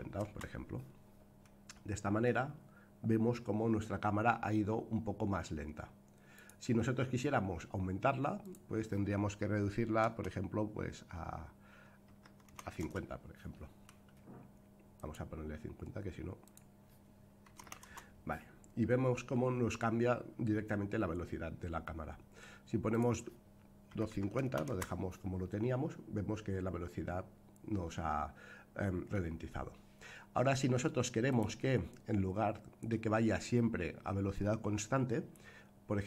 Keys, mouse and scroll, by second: 2.0 space, 6.3 click, 8.4-13.5 drag, 14.9 click, 16.4-18.7 drag, 22.9-25.3 drag, 31.2 click.